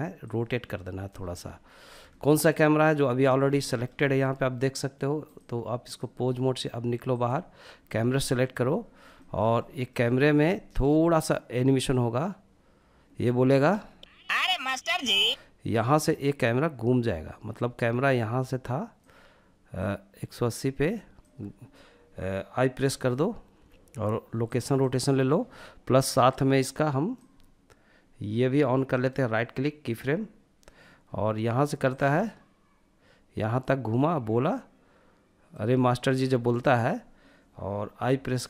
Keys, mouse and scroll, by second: 0.0 click, 0.6-1.1 scroll down 3, 1.3 shift+middle click, 1.8-2.5 middle drag, 2.6 scroll up 2, 2.9 shift+middle drag, 3.3-4.5 middle drag, 4.5-5.8 drag, 6.4-7.2 drag, 7.2-7.8 middle drag, 7.9-8.7 shift+middle drag, 8.8-9.6 middle drag, 9.7-10.2 middle drag, 11.2-12.9 drag, 13.0 space, 14.2 space, 15.1-22.1 drag, 25.8-28.1 drag, 28.1-31.2 right drag, 31.2-35.2 drag, 37.4 i.